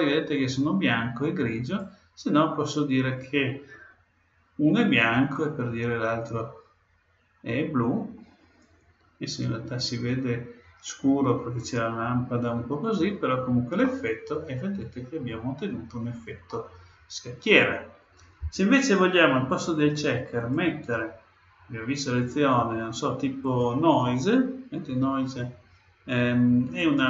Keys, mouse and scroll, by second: 1.6-3.5 drag, 13.8-15.8 middle drag, 20.4-22.3 drag, 26.8-27.0 drag.